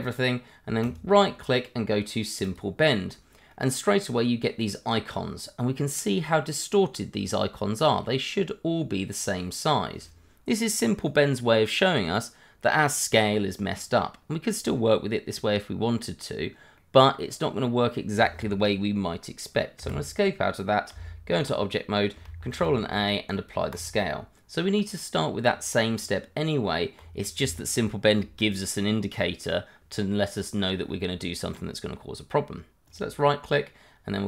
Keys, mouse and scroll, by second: 0.8 right click, 2.4 click, 3.5 middle click, 4.9-5.6 scroll up 1, 16.3 scroll down 1, 16.7 middle click, 19.8 Escape, 20.9 Tab, 22.5 ctrl+a, 23.7 click, 25.9 Tab, 30.6 scroll up 1, 30.9 middle click, 31.8 scroll down 1, 32.8 right click.